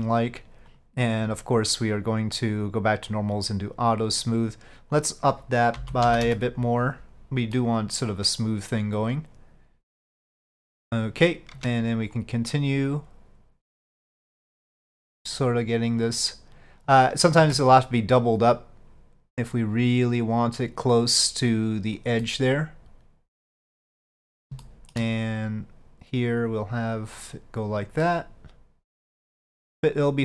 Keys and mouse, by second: 0.8 click, 3.2-7.1 drag, 7.6-8.1 middle drag, 10.4 click, 11.6 Tab, 12.2-15.4 drag, 16.1 click, 18.3-22.1 drag, 22.3-24.4 middle drag, 24.7 shift+middle click, 25.5-28.0 drag, 28.2-30.2 middle drag.